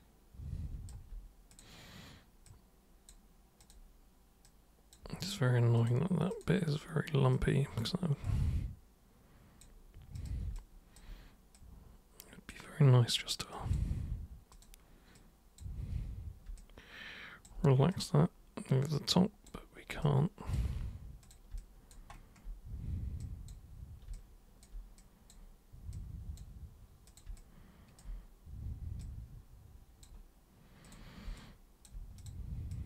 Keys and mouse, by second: 1.5 super+click, 2.4 super+click, 3.6 super+click, 4.4 super+click, 5.7 super+click, 6.3 super+click, 7.3 super+click, 8.2 super+click, 10.1 super+click, 10.5 alt+super+click, 11.5 super+click, 13.0 super+click, 13.5 super+click, 14.5 super+click, 15.1 super+click, 16.5 alt+super+click, 17.9 super+click, 18.9 super+click, 20.0-20.5 alt+super+drag, 21.2 super+click, 21.5 alt+super+click, 23.2 super+click, 24.1-24.6 alt+super+drag, 24.9 super+click, 25.9 super+click, 27.1 super+drag, 27.3-27.9 alt+super+drag, 29.0 super+click, 30.8 super+click, 31.3 alt+super+click, 32.2 super+click, 32.7 super+click.